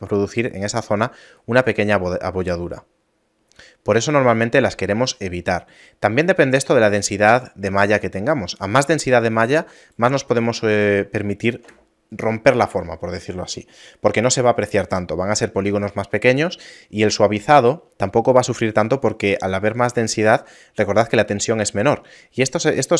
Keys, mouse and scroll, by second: 0.0-1.5 typing, 1.5 right click, 8.7 d, 9.8 right click, 10.5 a.